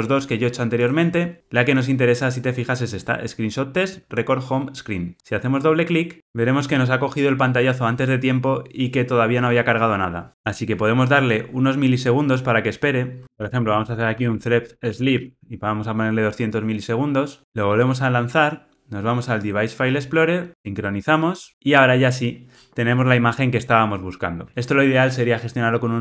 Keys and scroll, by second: 13.2 super+z, 14.6 Return.